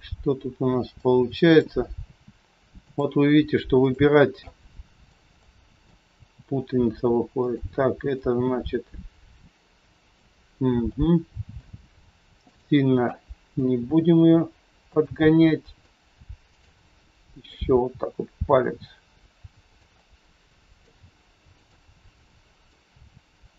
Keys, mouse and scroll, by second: 2.2 r, 3.7 click, 4.5 middle click, 5.5 middle click, 6.1 r, 8.1 click, 8.7 r, 10.8 middle click, 10.8 scroll up 1, 12.5 click, 13.1 middle click, 13.7 r, 15.2 middle click, 16.5 click, 17.1 middle click, 17.6 r, 19.8 scroll up 1, 20.0 middle click, 22.4 middle click, 22.4 click, 22.8 r.